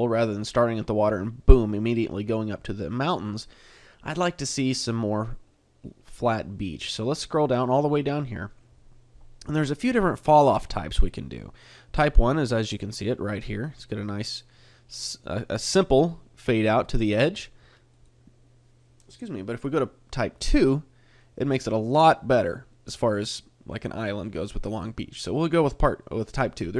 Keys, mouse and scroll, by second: 0.6 middle click, 2.5 middle click, 7.4 click, 12.6 middle click, 18.2 click, 21.2 middle click, 22.8 middle click, 23.8 middle click, 24.8 middle click.